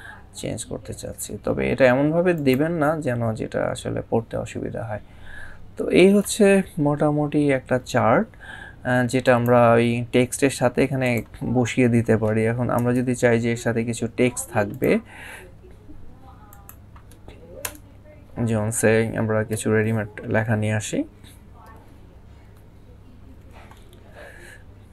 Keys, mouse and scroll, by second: 2.2 click, 9.0 click, 11.1 click, 12.6 Return, 14.5 click, 19.3 =, 23.1 9.